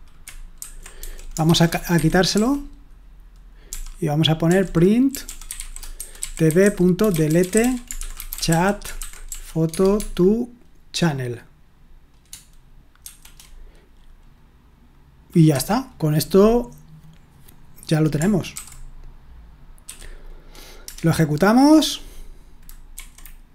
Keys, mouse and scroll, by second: 0.0-10.2 typing, 13.0 typing, 15.5 Escape, 18.5 shift+;, 19.6-20.8 typing, 22.9 F5.